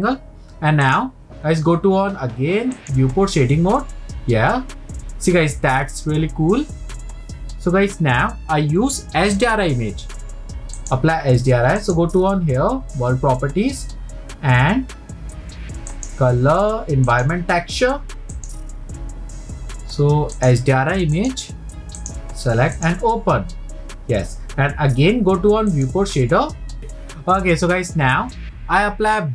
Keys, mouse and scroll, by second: 2.8 click, 5.6-6.1 scroll up 2, 10.8 click, 11.8 click, 15.9-18.3 drag, 18.4 click, 25.8 click.